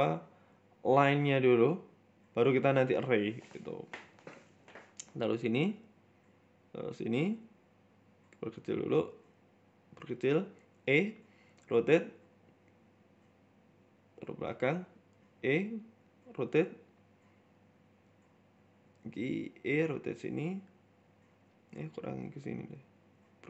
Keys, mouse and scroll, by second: 0.6 KP_1, 0.9 scroll up 4, 1.1 z, 1.8 shift+middle click, 2.0 scroll down 3, 2.2 Tab, 3.0 scroll up 1, 3.4 shift+middle click, 4.1 right click, 4.8 z, 5.7 z, 6.0 right click, 7.2 right click, 7.6 right click, 7.8 s, 8.5 right click, 9.4 s, 10.5 e, 11.4 r, 13.1 shift+middle click, 13.4-13.8 scroll up 1, 13.8 g, 15.0 shift+middle click, 15.4 e, 16.3 r, 17.0 g, 18.4 shift+middle click, 18.7 e, 19.8 r, 21.3 right click, 21.7 r, 22.5 right click, 22.7 s.